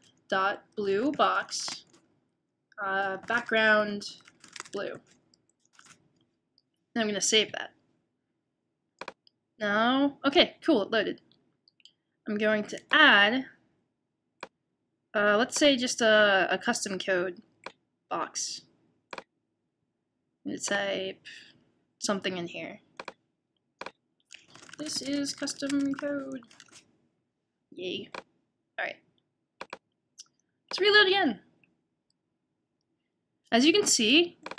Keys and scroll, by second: 4.5-5.3 typing, 25.2-26.1 typing, 27.3 typing.